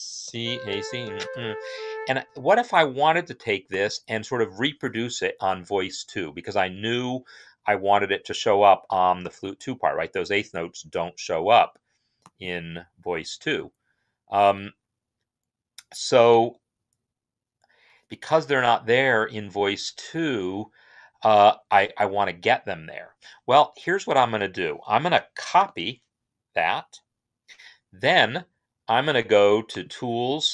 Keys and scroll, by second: 0.0-1.7 typing, 2.1 Escape, 25.4 ctrl+c.